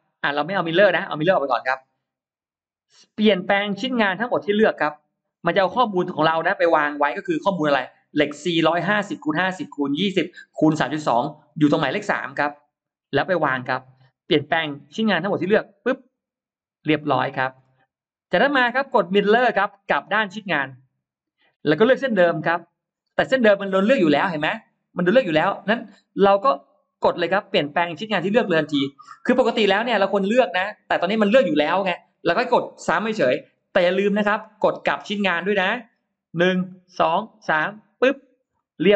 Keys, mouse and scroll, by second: 0.8 click, 16.0 click, 17.2-17.8 scroll up 1, 20.8 click, 23.4 scroll down 1, 23.6 middle click, 37.7 click, 38.4 middle click, 38.4-38.7 scroll up 1.